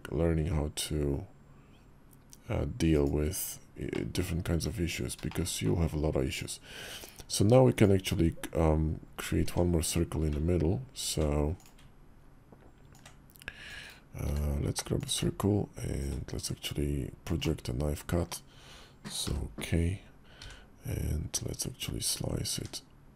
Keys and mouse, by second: 3.7 middle drag, 4.3 `, 5.0 shift+middle click, 7.7 Tab, 8.8 Tab, 9.2 Tab, 12.7-13.5 ctrl+drag, 14.0 d, 15.9-23.1 ctrl+drag.